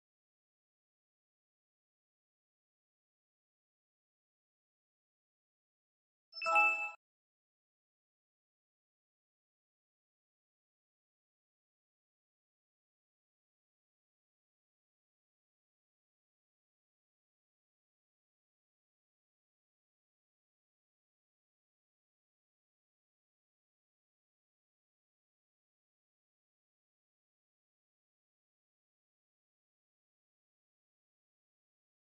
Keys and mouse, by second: 1.8 shift+middle click, 2.7 click, 4.9 click, 6.1 click, 8.0 click, 8.9-10.2 drag, 11.1-12.8 drag, 13.5 shift+middle drag, 14.5-14.8 shift+middle drag, 17.1 click, 18.0-19.8 drag, 21.6-26.0 drag, 29.0-29.8 middle drag, 31.2 click.